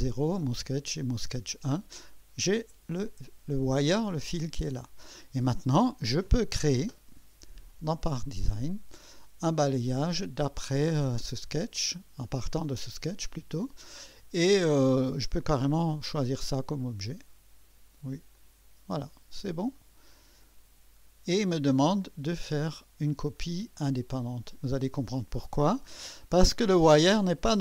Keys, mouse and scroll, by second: 4.0 click, 4.0 typing, 5.6 click, 7.7 click, 8.5 click, 9.8 click, 13.0 click, 15.3 click, 18.3 click, 19.7 click, 24.5 click.